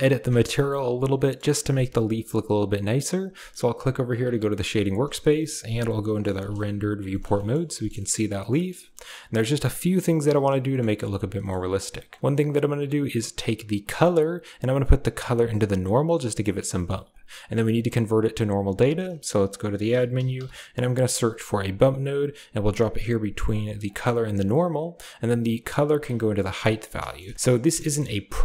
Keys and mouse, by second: 1.1 drag, 5.6 z, 6.7 ctrl+s, 7.0 middle drag, 7.3 shift+middle drag, 7.7 middle click, 7.9 shift+middle click, 8.4 middle click, 8.9 middle click, 9.7 click, 10.6 shift+middle click, 11.3 middle click, 11.6 click, 12.0 middle click, 13.8-15.9 drag, 16.7 shift+middle click, 18.6 shift+a, 23.7 drag, 25.6-26.3 drag, 27.7 shift+click.